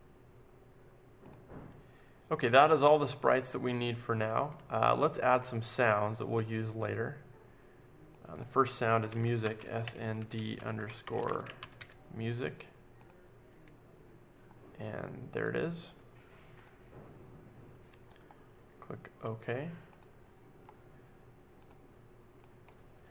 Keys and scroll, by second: 9.1-12.2 typing.